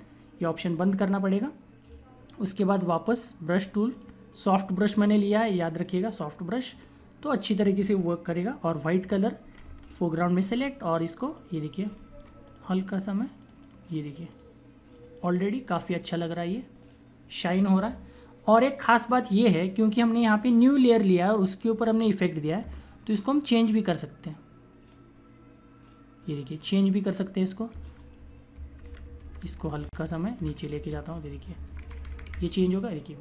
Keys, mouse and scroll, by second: 2.9 click, 4.8 right click, 6.5 click, 9.3-10.3 typing, 11.1 click, 11.8 typing, 12.4 click, 23.4 click, 28.5 Down, 33.0 click.